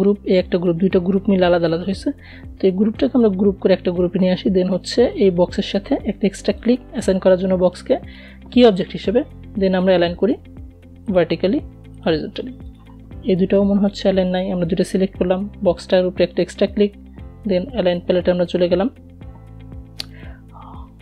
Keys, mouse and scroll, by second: 1.2 ctrl+g, 3.5 shift+click, 8.2-14.0 drag, 18.4-21.0 drag.